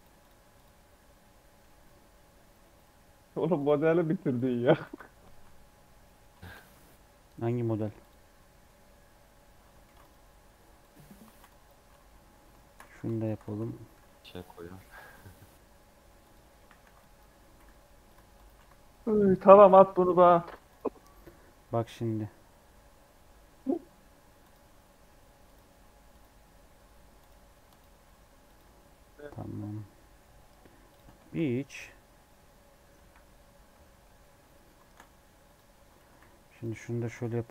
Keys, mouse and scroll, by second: 0.0 Tab, 0.1-1.5 drag, 1.5 s, 2.7 right click, 3.6 right click, 3.8 s, 4.5 Tab, 4.8 a, 5.2 shift+middle click, 5.7 scroll down 2, 6.0 middle click, 6.5 e, 8.4 scroll up 1, 9.1 Tab, 9.4 Tab, 9.8 ctrl+r, 10.9 3, 11.2 alt+z, 11.4 click, 11.8 alt+z, 12.8 alt+z, 13.0 shift+click, 13.4 alt+z, 13.9 alt+e, 16.5 1, 16.7 alt+z, 16.9 click, 17.4 g, 18.1 Tab, 18.3 click, 18.5 alt+z, 18.8-20.0 middle drag, 20.0 alt+h, 20.3-21.6 drag, 21.6 q, 25.4-28.9 drag, 28.9 scroll down 1, 29.6 scroll up 2, 29.8 middle click, 30.8-31.9 drag, 31.9 middle click, 32.9 KP_7, 33.7 shift+middle click, 34.7 shift+a, 35.6-35.9 scroll down 4, 35.9 g, 36.6 scroll up 2, 36.9 s.